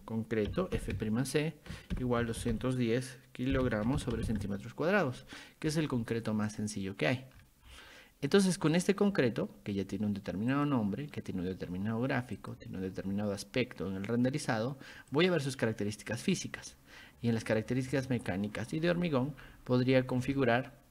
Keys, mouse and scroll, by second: 0.0-4.2 typing, 6.5 click, 7.4 scroll down 2, 7.7 scroll up 2, 8.7 click, 10.5 click, 12.4 click, 15.1 click, 17.4 click, 18.9 click, 20.3 ctrl+1.